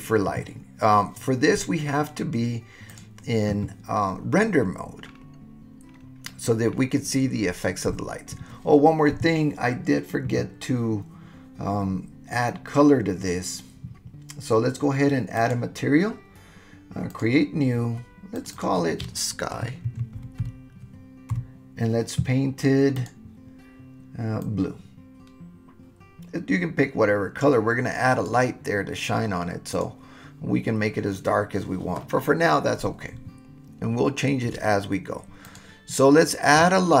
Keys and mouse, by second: 3.0 click, 15.4 click, 17.1 click, 18.4 click, 18.5-21.8 drag, 22.9 click, 29.7 click, 35.4 click.